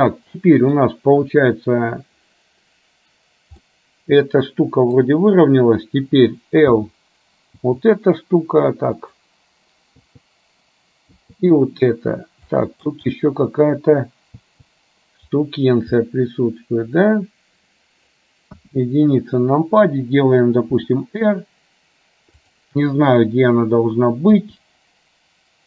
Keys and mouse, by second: 3.7-5.1 middle drag, 7.8 l, 9.1 click, 11.3 l, 12.7 middle click, 16.1-18.2 middle drag, 18.6 KP_1, 20.8 r, 24.6 g.